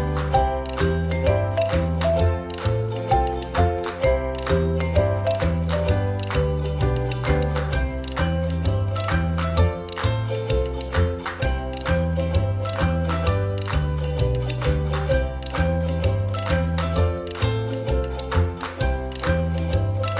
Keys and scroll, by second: 1.3 ctrl+z, 8.4 space, 9.3 ctrl+-, 14.1 space, 15.6 space.